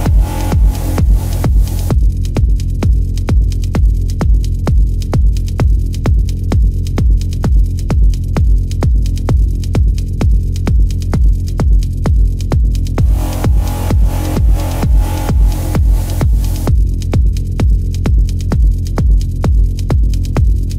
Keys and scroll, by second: 0.3 space, 4.2 space, 4.7 ctrl+-, 7.3 ], 7.8 ctrl+alt+z, 7.9 ], 9.1 space, 9.7 space, 11.4 space, 13.6 space, 14.6 space, 15.4 space, 17.3 space, 17.9 ctrl+alt+z, 18.4 ctrl+alt+z, 19.1 space, 20.4 space.